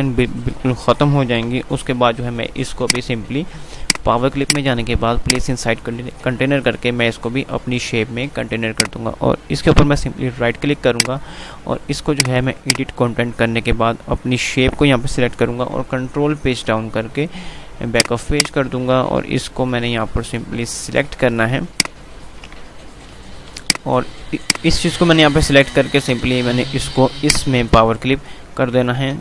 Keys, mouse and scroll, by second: 1.5 right click, 1.9 ctrl+g, 2.7 click, 8.8 right click, 10.9 click, 15.8 Page_Down, 17.9 click, 22.2 click, 23.2 ctrl+u, 23.9 click, 25.8-26.5 typing, 27.3 click.